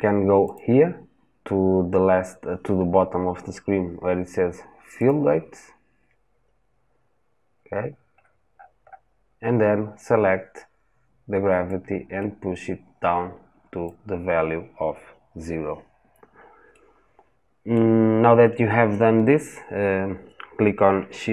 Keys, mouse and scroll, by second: 16.5-21.3 middle drag.